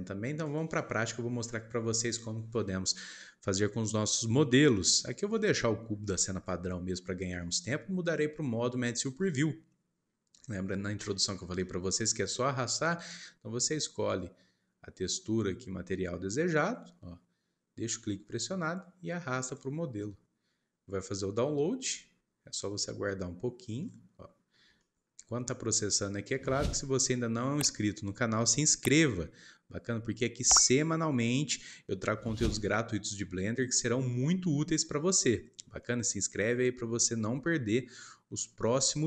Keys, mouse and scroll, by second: 0.4-3.4 drag, 3.9-5.3 scroll up 4, 5.3 shift+middle click, 6.1 scroll up 3, 6.4 shift+middle click, 7.2 scroll down 1, 7.3-9.8 middle drag, 9.8 click, 11.0-15.3 shift+middle drag, 23.8-29.2 middle drag, 35.8-38.8 shift+middle drag.